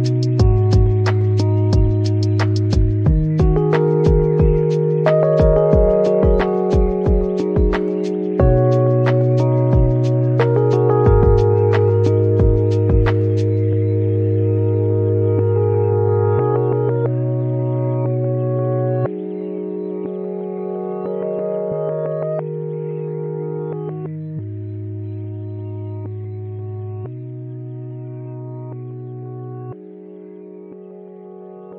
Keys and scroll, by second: 2.4 shift+a.